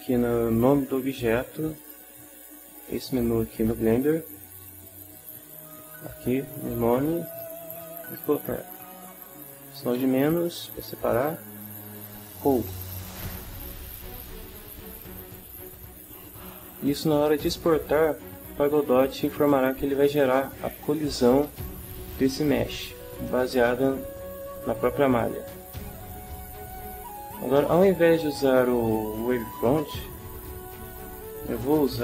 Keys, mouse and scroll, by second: 1.7 click, 7.3 click, 7.7 click, 9.9-12.7 typing, 14.3 Return.